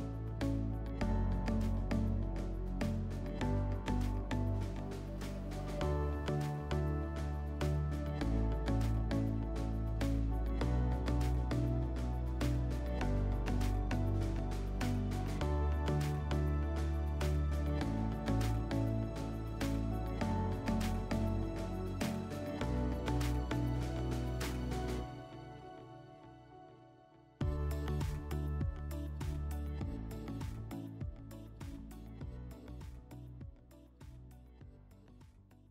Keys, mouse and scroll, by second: 0.6 click, 4.6 click, 6.6 click, 7.1-11.7 drag, 12.4 click, 16.0 click.